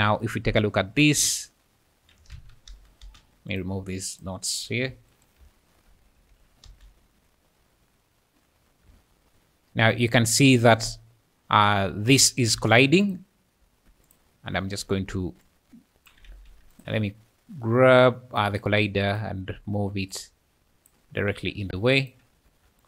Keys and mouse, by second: 2.4 Escape, 2.7 space, 3.0 space, 3.6 click, 6.0 Tab, 6.3 Tab, 6.7 space, 8.9-12.3 `, 12.6 `, 12.6 space, 13.6 `, 14.1 click, 16.3 ctrl+z, 16.8 click, 18.5 click, 19.2 click, 22.0 click.